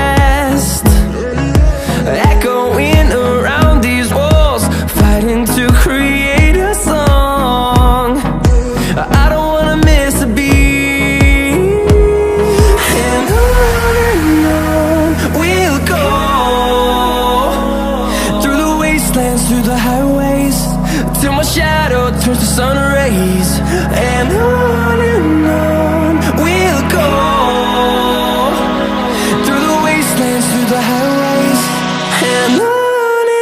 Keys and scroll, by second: 3.4 Left, 4.7 s, 9.8 e.